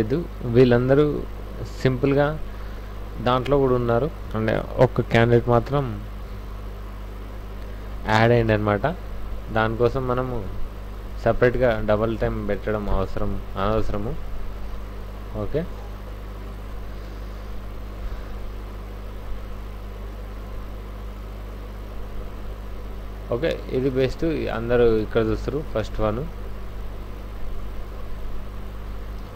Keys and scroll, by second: 8.1 ctrl+a, 8.3 c, 8.5 w, 11.1 w, 11.5 v, 11.7 v, 12.2 Tab, 12.8 Tab, 13.7 alt+Tab, 18.2 Right, 19.8 Left, 21.0 Right, 22.2 Left, 25.4 alt+Tab, 29.2 alt+a.